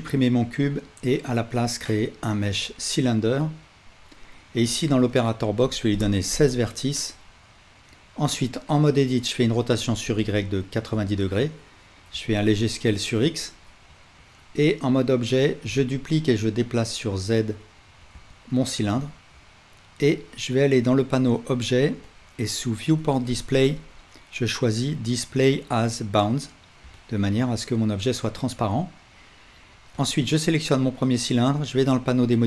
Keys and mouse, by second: 0.4 shift+a, 8.2 Tab, 9.5 r, 12.2 s, 13.4-18.5 right drag, 13.9 Tab, 15.5 shift+d, 18.5-20.9 alt+middle drag, 20.9-22.0 right drag, 22.0-26.8 middle drag, 30.1-31.5 right drag, 31.7-32.4 right drag.